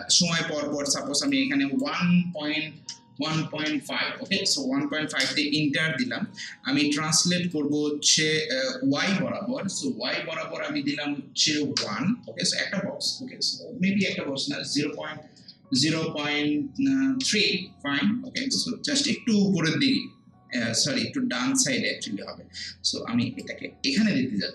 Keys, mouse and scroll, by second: 1.3-2.8 drag, 2.8 1, 3.8-4.6 typing, 5.2 Return, 7.5-10.3 drag, 11.8 1, 18.2 Return, 23.4-24.5 drag.